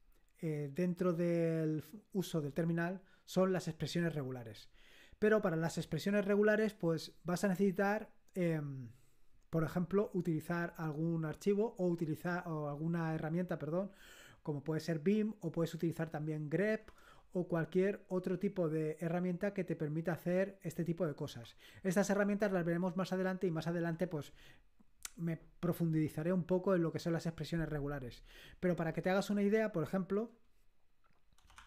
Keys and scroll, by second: 31.3-31.6 typing.